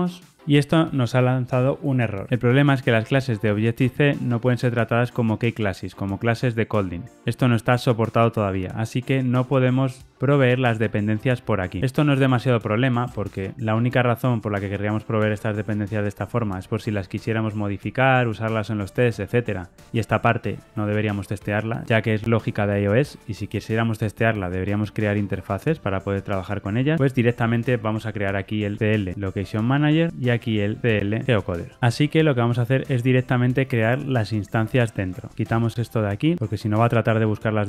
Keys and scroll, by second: 15.6 super+b, 29.7 Return, 31.2 Return, 36.3 ctrl+alt+o.